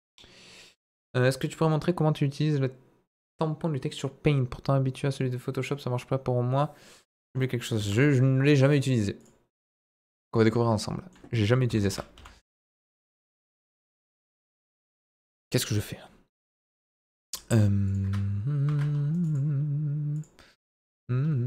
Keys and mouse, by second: 7.8 Tab, 8.8-10.5 drag, 10.7 middle click, 12.1 Delete, 12.4 shift+a, 13.7 ctrl+z, 14.6 ctrl+z, 16.7 Delete, 16.9 shift+a, 18.7 ctrl+2, 19.1-19.4 right drag, 20.1 click, 20.9 ctrl+a.